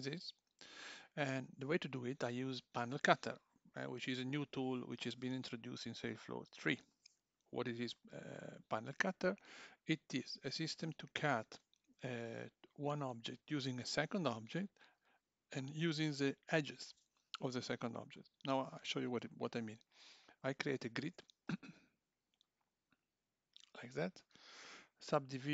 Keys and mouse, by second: 21.0 shift+a.